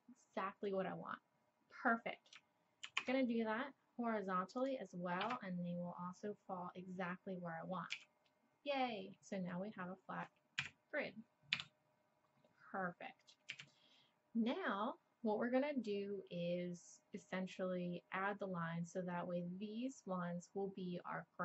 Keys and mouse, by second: 2.8 ctrl+r, 7.9 z, 8.4 click, 8.7-10.6 middle drag, 10.6 KP_1, 11.5 KP_7, 13.5 a.